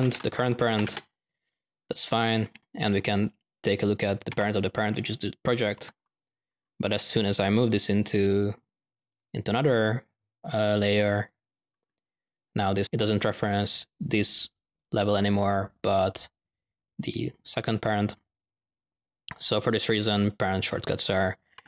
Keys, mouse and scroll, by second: 1.8 middle click, 3.5 click, 7.1 click, 7.6 right click, 7.8 right click, 8.0-8.5 typing, 9.0 click, 9.6-10.8 drag, 11.0 click, 11.0-11.4 typing, 11.8-12.2 middle drag, 12.2 click, 19.9-20.9 drag, 21.3 typing.